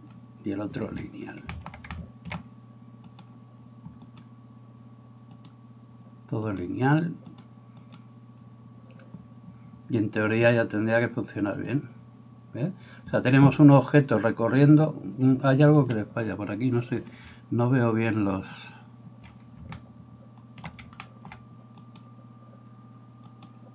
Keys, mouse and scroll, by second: 3.1 right click, 3.4-12.9 middle drag, 4.1 right click, 5.3 right click, 6.5 right click, 7.4 right click, 7.8 right click, 15.9 Escape, 15.9-18.5 middle drag, 18.8-20.7 middle drag, 20.8-23.7 shift+middle drag, 21.8 right click, 23.3 right click.